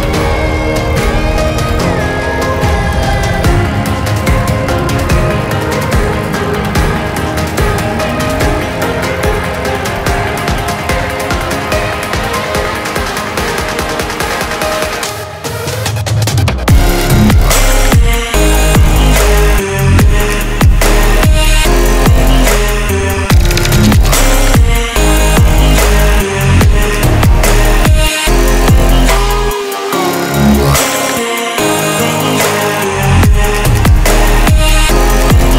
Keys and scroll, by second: 5.5 Delete, 6.3 Delete.